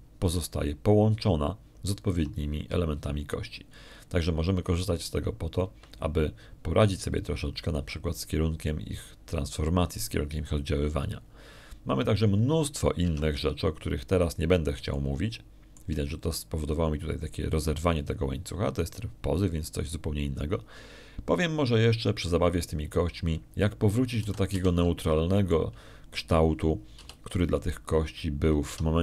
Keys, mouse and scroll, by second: 0.0 g, 1.4 Escape, 2.1 g, 7.5 Escape, 12.9 middle click, 14.9 Tab, 16.8 shift+click, 24.4 middle click, 25.0 middle click, 25.7 middle click, 26.0 a, 26.4 a, 26.9 shift+click, 28.8 a.